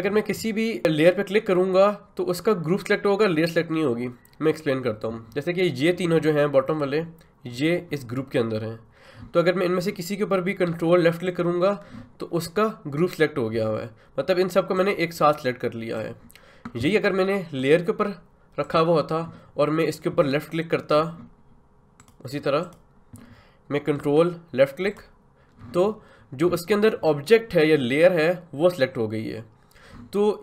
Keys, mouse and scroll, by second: 11.2 ctrl+click, 14.7-17.6 drag, 22.0 click.